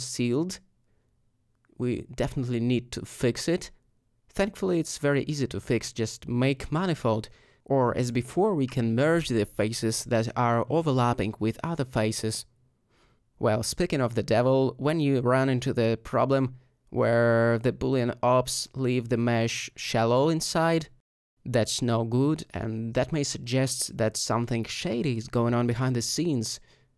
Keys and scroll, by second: 1.2 alt+Tab, 12.7 Tab.